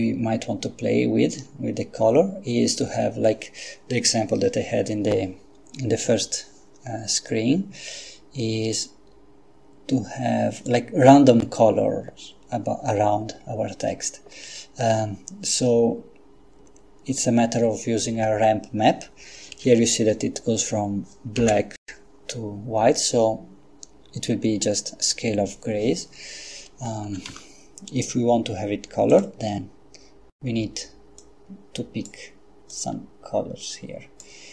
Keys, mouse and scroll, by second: 8.7 click, 10.6 click, 21.5 F12, 27.3 Escape, 29.2 click, 31.2 click, 32.7-34.5 drag.